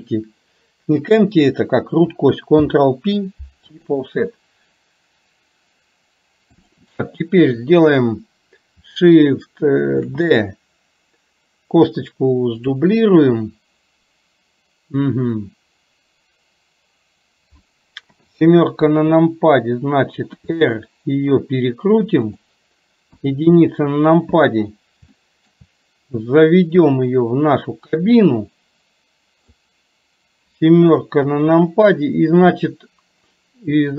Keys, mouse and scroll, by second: 2.8 ctrl+p, 6.6 click, 10.0 shift+d, 18.2 KP_7, 20.4 r, 23.3 KP_1, 25.2 shift+middle click, 26.4-31.2 drag, 31.2 KP_7, 33.8 click.